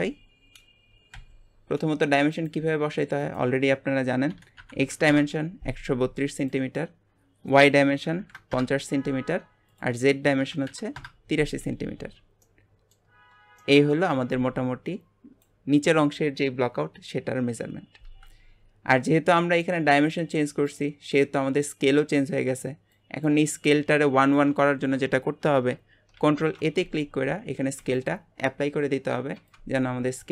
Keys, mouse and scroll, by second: 1.1 n, 2.3 click, 3.3-6.2 drag, 6.4-9.4 drag, 9.7-12.0 drag, 12.0 scroll up 4, 12.4-13.1 middle drag, 13.1 scroll up 4, 13.6-18.3 middle drag, 26.2 ctrl+a.